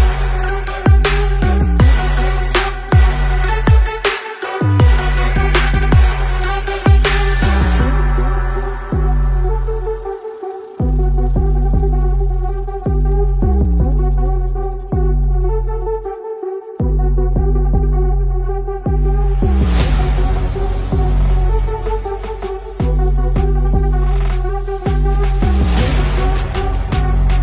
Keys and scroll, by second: 4.4 space, 4.5 space, 4.8 ctrl+z, 4.9 ctrl+z, 5.5 space, 7.5 shift+space, 9.2-10.8 typing, 9.7 Return, 13.7 ctrl+z, 13.7 space, 13.9 alt+Tab, 14.2 ctrl+v, 21.2 ], 21.4 space, 26.8 space, 26.9 space, 27.3 space.